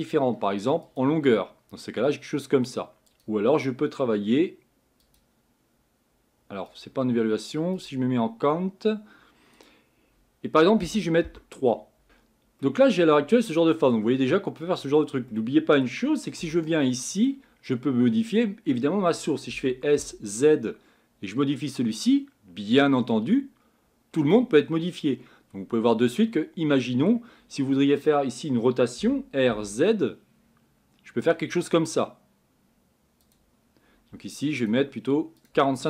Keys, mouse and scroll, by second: 12.0 ctrl+z, 12.6-14.2 middle drag, 14.2 scroll down 3, 14.7-15.3 scroll up 4, 15.3-16.4 middle drag, 16.4 Tab, 16.9 middle click, 17.5-18.2 scroll up 11, 19.5 s, 24.6-25.8 scroll down 10, 25.8-27.4 middle drag, 27.4-29.0 scroll up 5, 29.0 r.